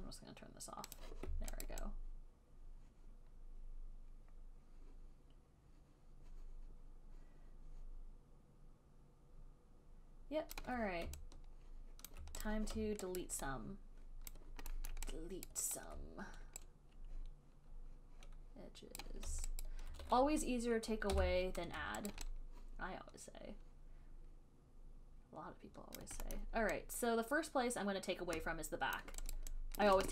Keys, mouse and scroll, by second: 1.3 click, 2.0 alt+right click, 10.8 alt+click, 12.4 alt+click, 12.7 click, 13.5 alt+right click, 14.6 alt+click, 15.2 alt+middle click, 15.7 alt+right click, 17.4 alt+scroll, 19.2 right click, 19.9 alt+right click, 20.0 alt+middle click, 21.4 b, 22.4 alt+right click, 26.2 alt+right click, 26.6 alt+click, 26.6 alt+middle click, 29.2 alt+click, 29.6 alt+right click, 30.0 alt+click.